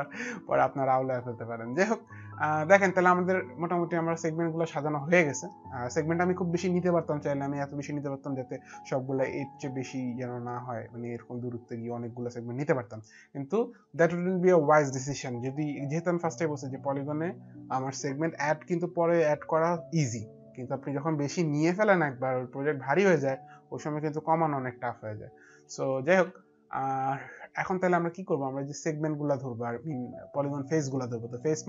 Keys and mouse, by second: 31.3 click.